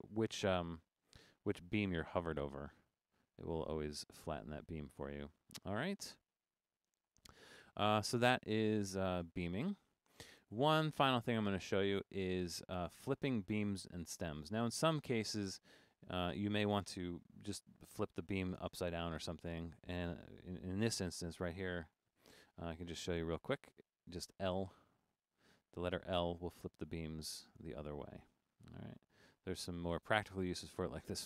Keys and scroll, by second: 0.0 Left, 0.3 Right, 0.9 shift+m, 1.4 Right, 1.5 Right, 1.7 Right, 2.3 shift+m, 2.9 shift+m, 3.2 Right, 3.7 shift+m, 4.3 shift+m, 24.2 |, 25.0 Right, 25.2 Right, 25.3 Right, 26.2 |, 26.6 Right, 26.8 Right, 27.1 Right, 27.4-29.9 typing, 28.4 Left, 28.6 Left, 28.9 Left, 29.3 Left, 29.5 Left, 29.7 Left, 30.2 Right, 30.3 Right, 30.5 Right, 30.6 Right, 30.9 Right.